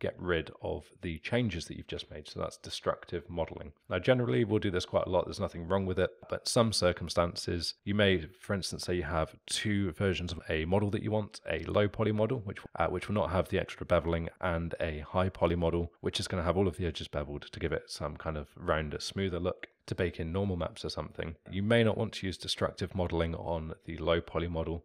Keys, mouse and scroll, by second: 3.8 click, 5.5-7.8 alt+middle drag.